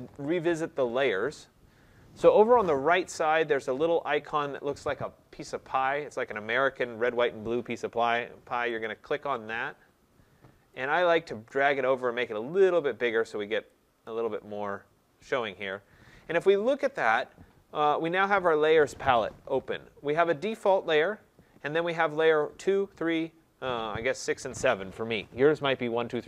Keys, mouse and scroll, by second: 8.8 click, 11.5 click, 14.1 click, 14.6 click.